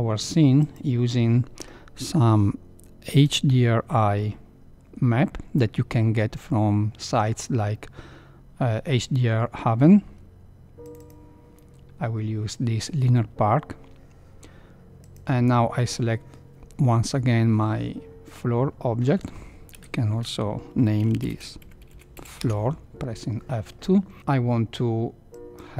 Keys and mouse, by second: 0.6 click, 19.7 F2, 21.9 o, 25.3 click.